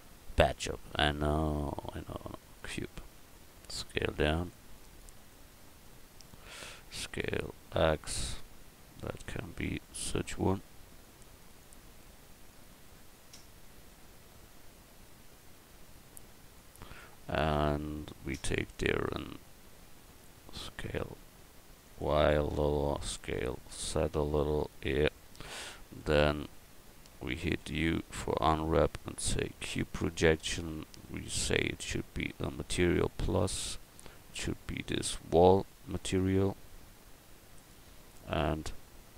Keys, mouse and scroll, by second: 3.2 s, 4.7 click, 6.2 middle click, 6.8 s, 9.2 right click, 10.3 click, 12.2 middle click, 17.5 a, 18.7 right click, 19.0 Tab, 19.6 middle click, 20.5 s, 23.2 s, 26.0 Tab, 26.5 Tab, 27.6 u, 32.5-38.0 drag.